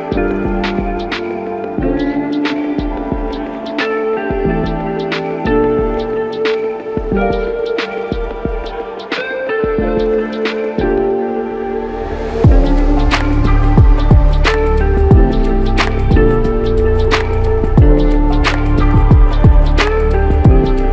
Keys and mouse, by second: 0.0 alt+shift+click, 1.0 f, 2.0 ctrl+alt+click, 4.8 f, 5.2 double click, 7.5 f, 9.3 double click, 13.8 typing, 16.1 typing, 17.2 alt+click, 20.1 alt+click.